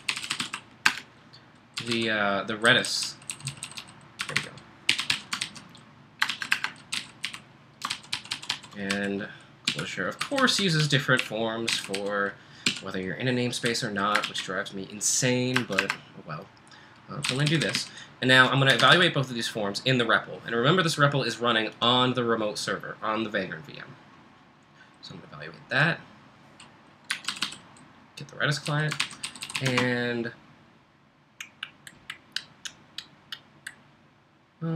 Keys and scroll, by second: 0.0-0.9 typing, 1.9-14.2 typing, 15.6 Return, 15.8 Return, 17.1-19.4 typing, 26.9-30.1 typing.